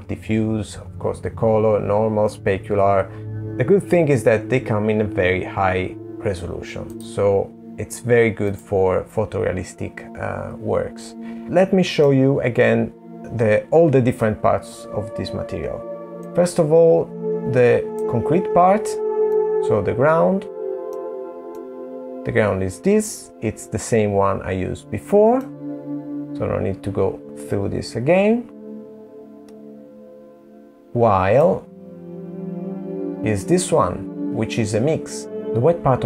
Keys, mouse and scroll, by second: 14.5 middle click, 15.3 middle click, 25.2 click, 32.3 middle click, 35.3 scroll down 2.